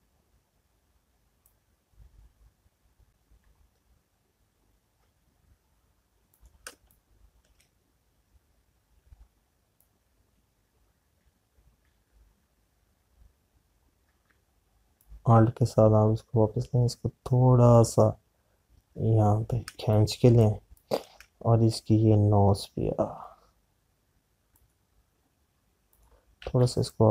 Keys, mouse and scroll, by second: 0.8 space, 4.0 click, 7.1 click, 8.7 space, 11.9 click, 15.8 alt+click, 20.5 space, 25.8 click.